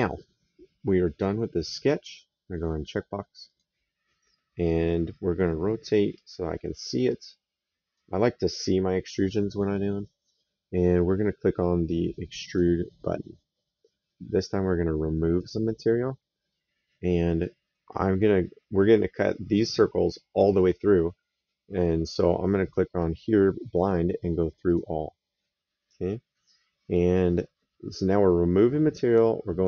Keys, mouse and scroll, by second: 3.2 click, 4.4 right click, 9.3 middle click, 12.2 click, 15.1 click, 22.4 click, 24.4 click.